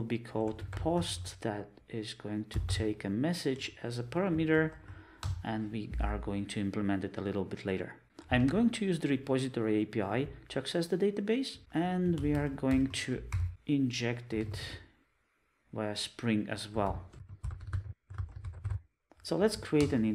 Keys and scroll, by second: 3.7 Return, 19.0 alt+Return, 19.9 alt+Return.